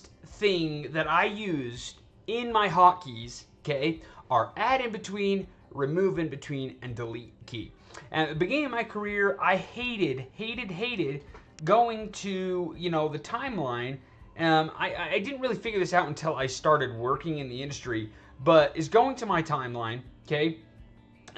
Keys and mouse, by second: 12.9 right click.